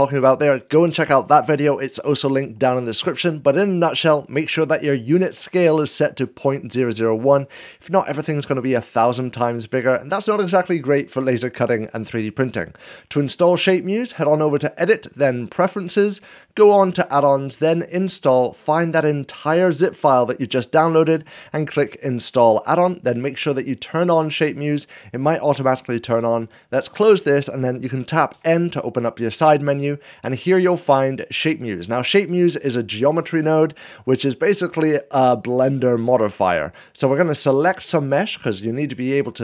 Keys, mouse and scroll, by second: 8.4-10.4 drag, 14.2-15.2 drag, 17.7-19.6 drag, 21.8-22.8 drag, 23.7-24.8 drag, 26.6-27.7 drag, 28.0 n, 28.4 n, 31.0-32.1 drag, 37.3-38.3 drag.